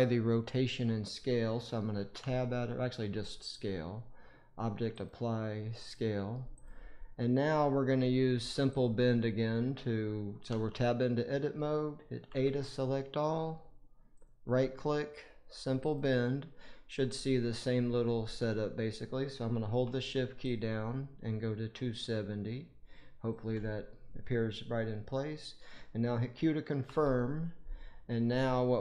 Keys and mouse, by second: 2.1 Tab, 3.3-5.2 right drag, 6.5 click, 7.3-8.6 middle drag, 8.6 click, 8.7-10.4 middle drag, 10.4 Tab, 12.2 a, 14.1-14.8 drag, 15.1 click, 16.5-28.8 drag.